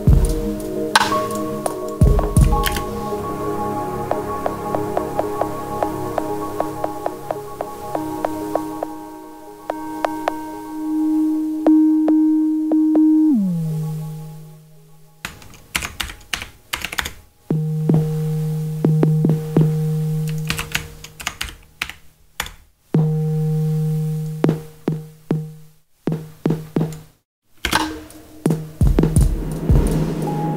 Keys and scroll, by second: 2.6 space, 14.9 super+a, 15.7 shift+super+d, 15.9 shift+3, 16.7 BackSpace, 16.8 2, 16.9 Return, 20.4 super+a, 21.1 shift+super+d, 21.3 shift+3, 21.7 6, 22.3 Return, 27.6 space.